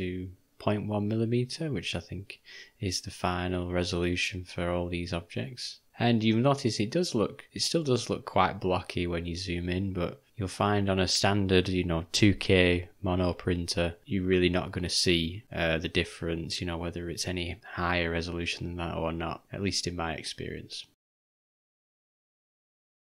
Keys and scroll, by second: 9.4 u, 14.9 j, 18.7 u, 20.9 f, 22.4 d.